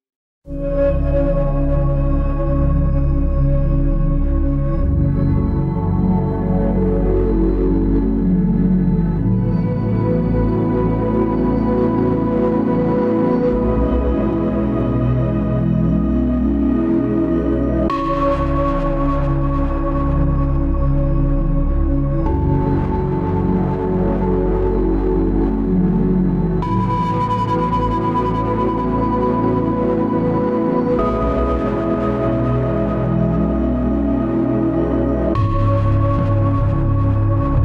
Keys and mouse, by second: 3.2 right click, 4.1 s, 8.4 ctrl+z, 8.6 ctrl+z, 9.8 w, 10.7 ctrl+r.